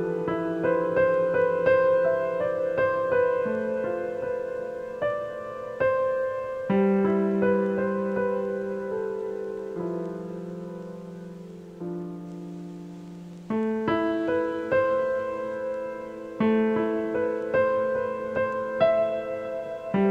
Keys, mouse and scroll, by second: 1.0-1.7 drag, 2.2 click, 3.0 click, 3.7 a, 3.9 a, 4.1-4.7 scroll down 2, 5.1-8.1 shift+middle drag, 8.2 click, 9.2 click, 10.1 click, 10.5 click, 11.0 click, 12.0-15.1 drag, 18.5 click.